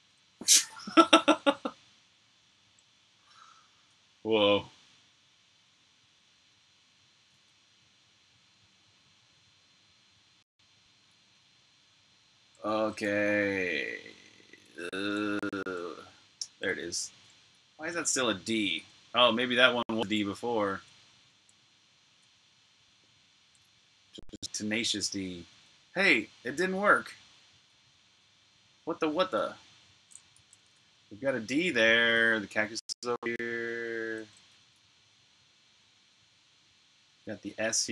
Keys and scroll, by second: 0.0-0.3 typing, 7.3-9.5 typing, 10.5 typing, 12.4-14.2 typing, 18.8-21.0 typing, 22.2-27.5 typing, 30.3-33.5 typing, 35.7-37.5 typing.